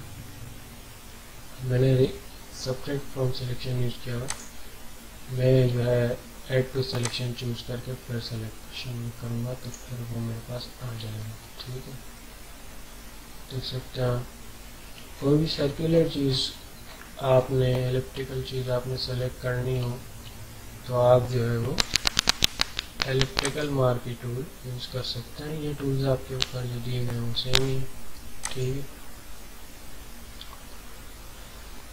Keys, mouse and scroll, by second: 1.4 typing, 4.3 click, 4.3 typing, 7.0-11.1 drag, 7.0 typing, 11.1 alt+scroll down 1, 11.8 alt+scroll down 1, 12.5 alt+scroll down 1, 15.1 ctrl+scroll up 1, 18.1-19.2 alt+scroll down 5, 21.7 ctrl+d, 23.4 right click, 28.4 click.